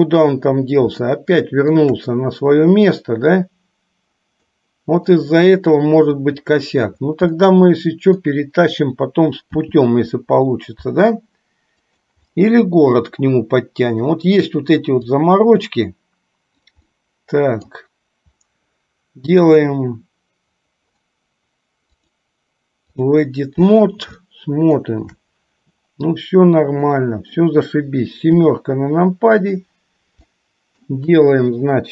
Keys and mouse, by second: 1.3-2.1 shift+middle drag, 4.7-5.3 middle drag, 6.2 click, 7.7 middle click, 9.5 g, 12.6-14.3 middle drag, 15.4-17.0 drag, 17.1-18.0 middle drag, 22.0-23.5 drag, 24.4 shift+middle click, 27.0 middle click, 28.5 KP_7, 30.4 shift+middle click.